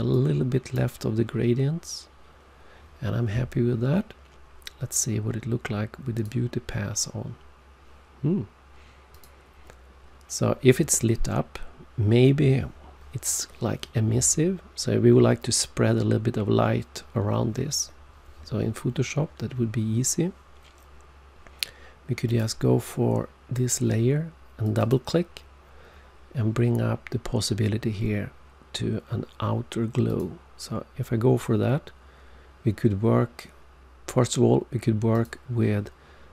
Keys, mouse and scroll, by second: 0.1 click, 6.1 click, 9.1 click, 22.2 click, 24.6 click, 24.9 click, 30.0 click, 35.1 click.